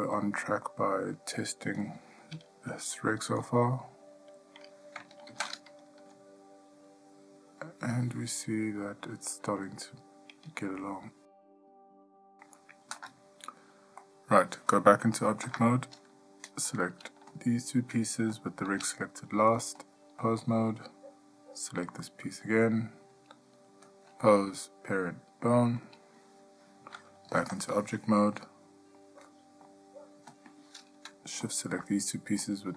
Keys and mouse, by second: 0.0-0.6 shift+middle drag, 0.8-1.3 middle drag, 3.5 h, 5.5 ctrl+z, 6.2 g, 14.2-14.6 middle drag, 15.6 Tab, 17.5 shift+click, 18.5 shift+click, 20.0-20.7 drag, 22.0 click, 24.1-26.0 drag, 27.5 Tab, 28.6-29.1 middle drag, 29.5-29.9 shift+middle drag, 31.6 shift+click.